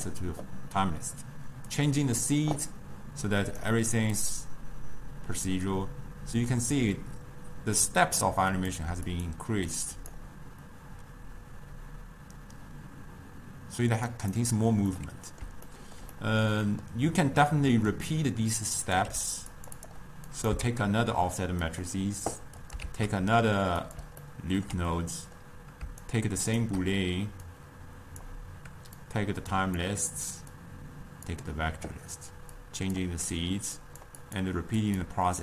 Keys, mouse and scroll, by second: 1.8-7.4 drag, 8.7-13.2 drag, 14.3 click, 15.0-18.1 middle drag, 18.1-19.1 drag, 19.1 g, 20.4 click, 21.2 shift+d, 22.7 click, 23.5 shift+d, 24.3-26.1 ctrl+middle drag, 26.1 shift+right click, 27.6-29.2 drag, 30.7 click, 32.7-34.0 drag, 34.3-35.4 drag.